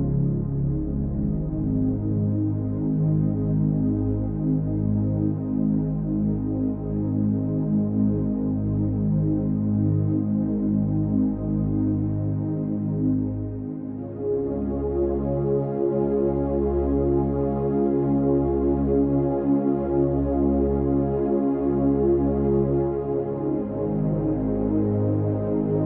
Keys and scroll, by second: 22.5 ctrl+j.